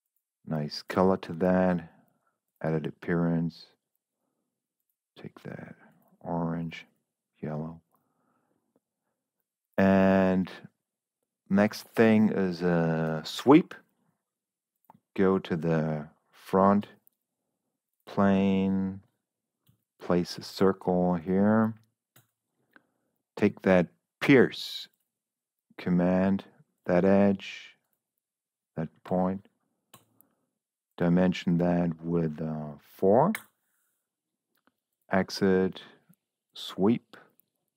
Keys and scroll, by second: 17.2 s, 19.6 c, 22.1 Escape, 29.5 Escape, 29.9 d, 32.7 4, 33.3 Return.